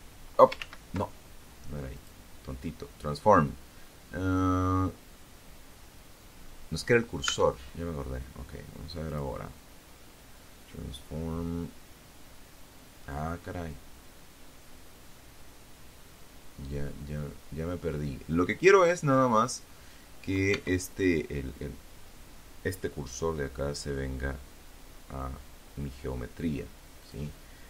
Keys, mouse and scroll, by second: 0.1 click, 5.4 Tab, 7.3 click, 18.7 Tab, 25.1 click.